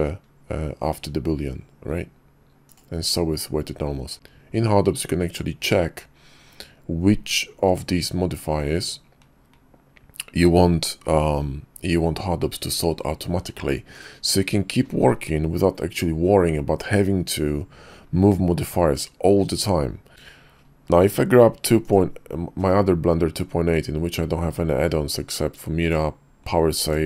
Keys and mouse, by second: 20.1 ctrl+z, 20.1 x.